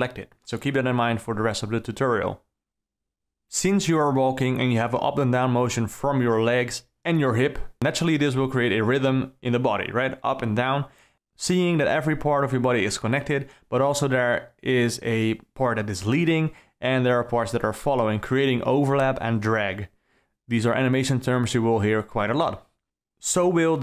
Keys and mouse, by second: 1.9-3.7 drag, 4.6 ctrl+c, 7.2-9.1 drag, 9.7 ctrl+shift+v, 20.5 d, 21.6 KP_0, 22.8 KP_Decimal.